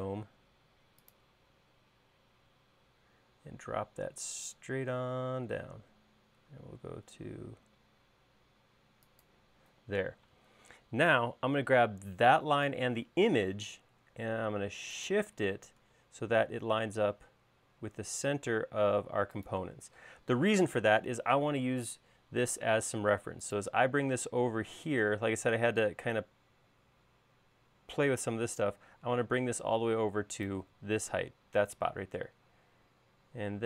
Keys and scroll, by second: 9.9 space, 13.5 m, 20.1 |.